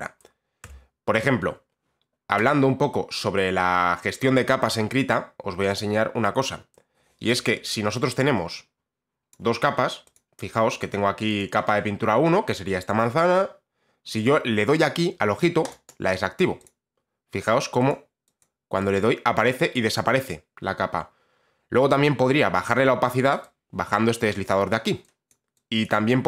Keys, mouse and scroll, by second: 0.8 t, 9.4 click, 10.3 click, 10.9 click, 11.5 click, 15.8 click, 16.0 click, 16.7 click, 18.0 click, 18.5 click, 19.0 click, 19.6 click, 20.2 click, 22.8 click, 24.0 click, 24.8 click, 25.4 click, 26.0 click.